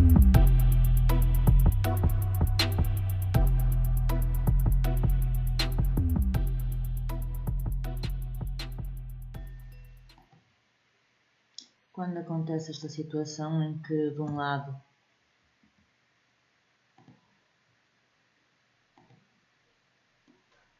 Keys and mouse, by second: 2.5 w, 3.6-4.6 middle drag, 15.0-17.0 middle drag, 17.0-18.9 drag, 18.9-20.3 right drag.